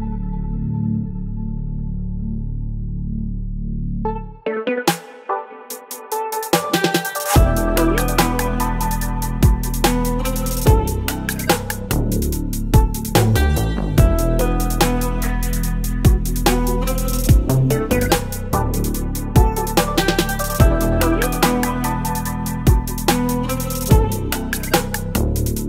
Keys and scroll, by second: 4.5 Return, 6.0 ctrl+t, 11.3 ctrl+j, 12.2 ctrl+t, 22.4 Return.